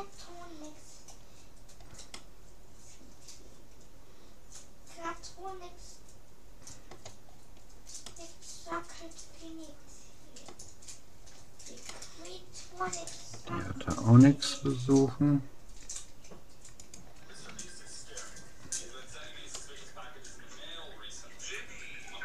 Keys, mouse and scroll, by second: 2.1-3.9 middle drag, 7.3-9.7 middle drag, 11.1-11.9 scroll up 1, 11.9-13.3 middle drag, 14.7 g, 19.1 a, 19.5-20.5 middle drag, 20.7 middle click, 21.1 middle click.